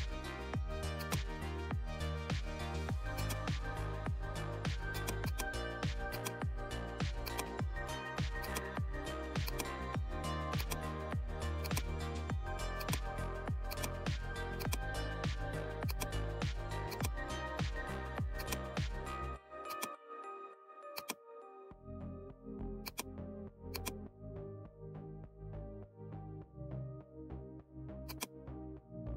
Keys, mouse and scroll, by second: 3.1 click, 3.1-18.3 drag, 22.8 click, 28.1 click.